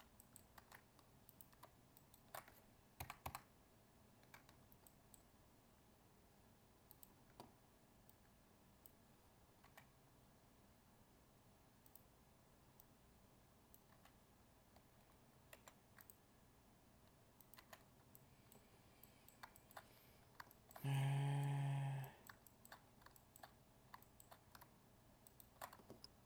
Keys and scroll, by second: 0.5 ctrl+Tab.